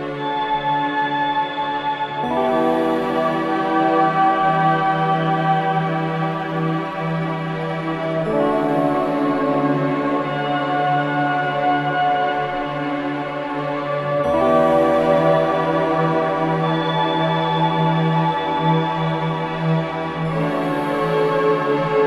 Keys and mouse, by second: 0.3-2.3 drag, 1.9-2.7 typing, 4.2-13.9 typing, 4.7 click, 7.2 click, 9.5 click, 11.3 click, 14.7-18.4 drag, 18.2-20.8 typing, 21.5 click, 21.9 click.